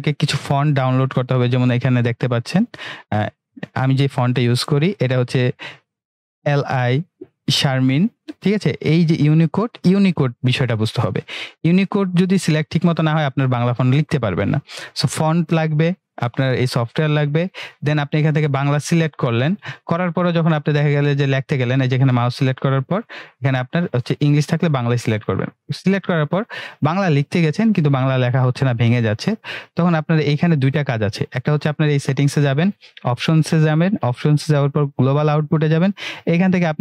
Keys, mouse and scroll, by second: 2.1 click, 4.4 click, 12.2 click, 19.0-27.4 drag, 31.7 click, 32.2 typing.